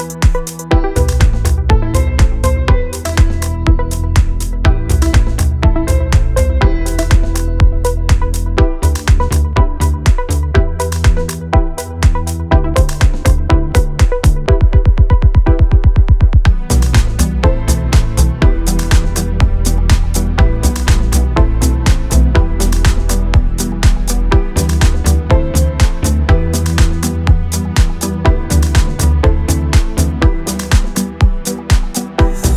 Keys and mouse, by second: 0.1 e, 0.3 shift+middle click, 0.6 middle click, 1.0 Delete, 1.1 middle click, 1.6 middle click, 1.9-5.8 typing, 2.1 click, 2.9 click, 3.4 shift+middle click, 3.5 click, 3.7 click, 4.3 shift+middle click, 4.5 click, 4.7 shift+middle click, 5.6 shift+middle click, 6.4 middle click, 7.2 middle click, 7.7 click, 8.0 middle click, 9.0 KP_1, 9.5 shift+middle click, 9.7 shift+middle click, 10.8 middle click, 11.1 middle click, 11.6 middle click, 11.7 middle click, 11.9 middle click, 12.1 middle click, 12.3 shift+middle click, 12.5 shift+middle click, 13.1 middle click, 13.3 middle click, 13.4 shift+click, 13.4 middle click, 13.5 middle click, 13.7 click, 13.8 middle click, 14.0 middle click, 14.2 middle click, 14.3 click, 14.5 middle click, 14.7 middle click, 14.9 middle click, 15.3 middle click, 15.5 middle click, 15.9 middle click, 16.5 shift+middle click, 16.7 click, 16.7-17.3 d, 17.1 click, 17.6 middle click, 17.7 shift+middle click, 17.9 middle click, 18.1 middle click, 18.8 middle click, 19.1 middle click, 19.5 middle click, 20.0 middle click, 20.2 middle click, 20.7 middle click, 22.2 middle click, 22.5 middle click, 22.9 middle click, 23.3 middle click, 23.5 middle click, 24.2 middle click, 24.4 middle click, 24.7 middle click, 25.4 middle click, 25.6 middle click, 26.1 shift+middle click, 26.2 middle click, 26.6 middle click, 27.3 middle click, 27.6 click, 28.6 click, 28.8 middle click, 29.4 middle click, 29.8 middle click, 30.4 middle click, 30.6 KP_1, 30.9 shift+middle click.